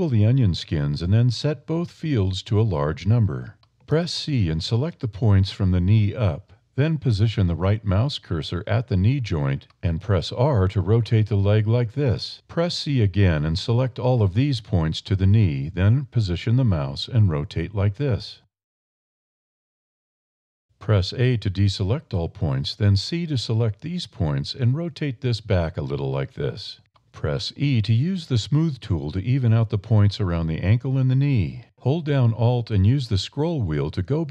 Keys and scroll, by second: 4.9 c, 9.6 r, 13.6 c, 16.2 r, 19.3 r, 21.1 a, 22.3 c, 24.8 r, 26.3 a, 27.7 e.